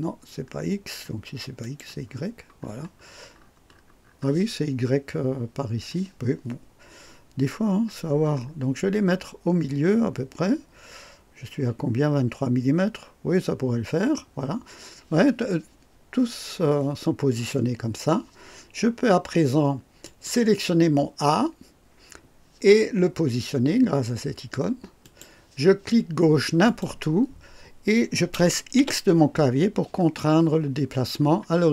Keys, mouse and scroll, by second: 0.2-0.7 scroll up 1, 1.6 click, 2.1-2.4 scroll down 1, 2.6-4.3 scroll down 7, 7.1-7.9 scroll down 4, 8.0-8.7 scroll down 4, 10.1 scroll down 2, 17.3 click, 20.0 click, 25.0 click, 26.6 click, 28.8 x, 31.0-31.4 scroll up 1.